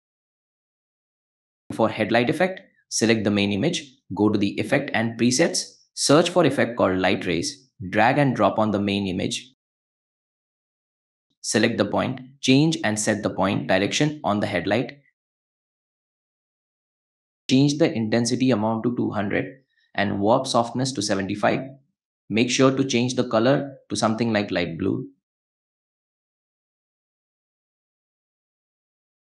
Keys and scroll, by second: 1.5 space, 6.1-7.5 typing.